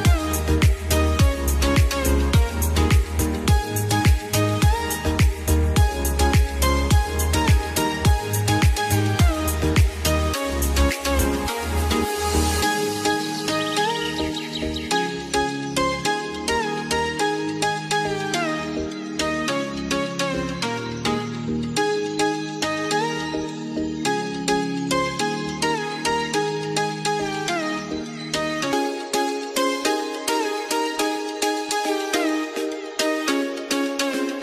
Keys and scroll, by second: 0.9 F2, 8.6 F2, 22.7 ctrl+z, 30.2 ctrl+z.